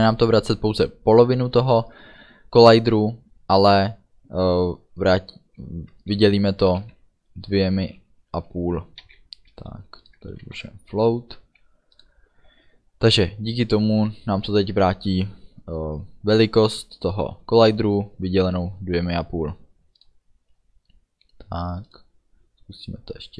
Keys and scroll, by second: 8.0 5, 10.5 ctrl+s.